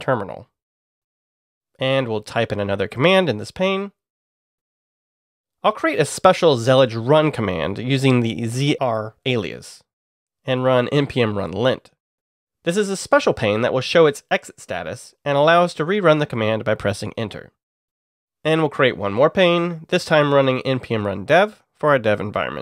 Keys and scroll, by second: 0.9-5.1 typing, 7.4-11.7 typing, 19.1 alt+n, 19.7-22.6 typing.